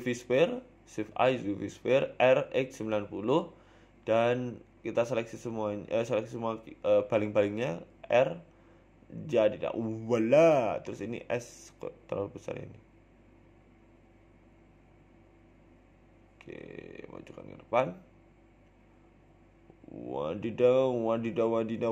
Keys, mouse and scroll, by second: 0.0 shift+a, 1.4 s, 2.8 s, 4.2 r, 5.3-5.6 scroll down 1, 5.9 scroll down 1, 5.9-9.7 typing, 10.3-10.7 scroll down 3, 10.6 Tab, 10.7 middle click, 11.4 scroll up 2, 11.5 Tab, 12.1 s, 14.5 s, 17.6 Tab, 18.2 g, 19.9 scroll down 3, 20.2 scroll up 3, 20.3 Tab, 20.6 s, 21.7 Tab.